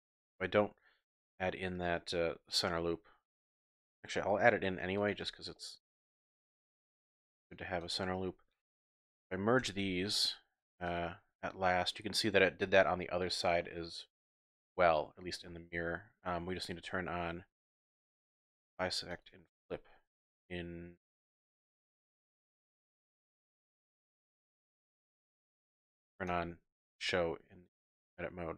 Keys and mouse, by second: 0.6 click, 1.9 click, 2.6 click, 4.0-5.2 ctrl+drag, 4.5 ctrl+r, 5.5 click, 6.9 click, 7.0 typing, 7.4 shift+click, 7.8 shift+click, 9.6-11.5 typing, 11.6 click, 12.6 z, 13.0 click, 13.6 click, 14.3 typing, 15.0 click, 18.5 click, 19.1 click, 19.7 z, 21.4 click, 22.3 click, 22.7 click, 23.6 z, 25.0 middle click, 25.2 click, 26.3 click, 27.4 z.